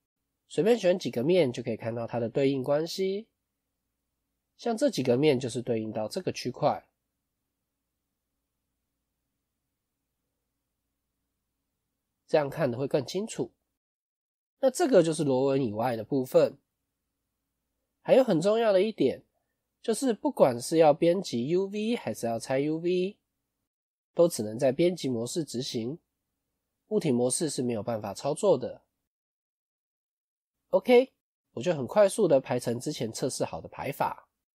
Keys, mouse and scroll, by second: 0.1 click, 2.8 3, 2.8 click, 3.2 click, 9.7 click, 13.8 click, 16.0-16.7 scroll up 2, 16.7-17.2 scroll up 2, 17.2 middle click, 18.1 scroll down 1, 18.2 middle click.